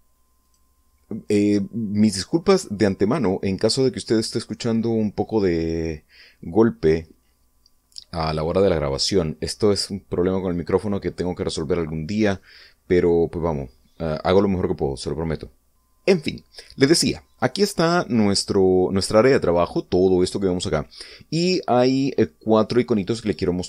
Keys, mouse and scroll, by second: 0.1 click.